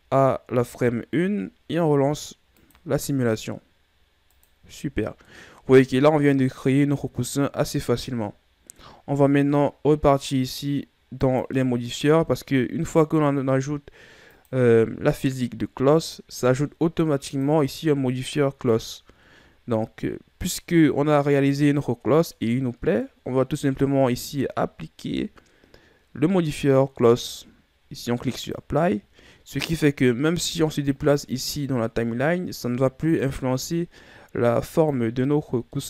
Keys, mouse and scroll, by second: 3.1 click, 5.9-8.9 middle drag, 11.8 click, 14.9 click, 17.9 click, 20.4-23.4 middle drag, 27.7 click, 31.5 click.